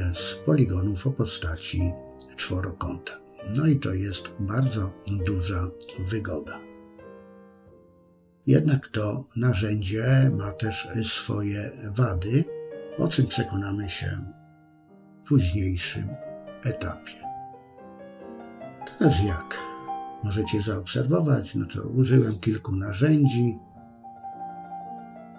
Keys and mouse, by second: 0.3 shift+click, 0.5 shift+click, 1.1 shift+click, 1.4 middle click, 2.1 middle click, 2.6 click, 2.8 click, 3.1 click, 3.4 middle click, 4.0 ctrl+r, 4.5 click, 4.9 ctrl+click, 5.5 ctrl+r, 5.8 middle click, 6.2 shift+middle click, 6.3 middle click, 7.2 click, 8.0 click, 8.3 click, 8.8 click, 9.3 ctrl+click, 9.5 ctrl+click, 9.9 middle click, 10.2 ctrl+click, 10.4 ctrl+click, 10.6 ctrl+click, 11.1 middle click, 11.7 ctrl+click, 12.3 ctrl+click, 12.7 ctrl+click, 13.3 click, 13.6 click, 14.3 middle click, 14.6 shift+click, 14.8 shift+click, 14.9 shift+click, 15.1 middle click, 15.5 ctrl+click, 15.9 ctrl+click, 16.2 ctrl+click, 16.8 shift+click, 16.9 middle click, 17.5 middle click, 17.9 click, 18.1 middle click, 18.9 ctrl+r, 19.4-20.5 middle drag, 20.8 KP_1, 22.2 click, 22.6 middle click, 23.0 KP_3, 23.7 click, 24.4 middle click, 24.9 middle click, 25.2 middle click.